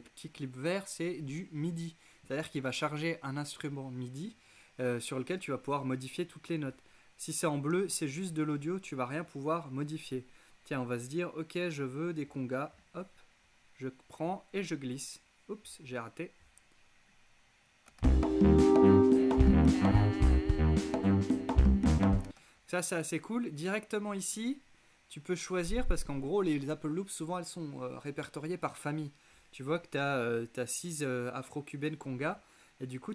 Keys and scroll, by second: 18.0 space, 22.3 space.